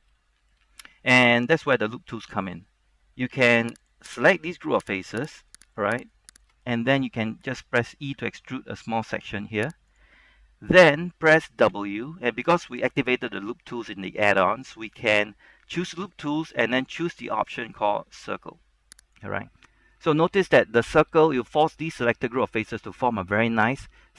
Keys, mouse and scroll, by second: 3.5 ctrl+Tab, 3.9 click, 4.5 right click, 5.9 shift+right click, 6.2 shift+right click, 6.5 shift+right click, 6.8-8.3 scroll down 1, 8.3 e, 10.1 click, 11.8 w, 19.2 click, 20.1 middle click, 21.0 scroll up 1, 21.2-24.1 shift+middle drag.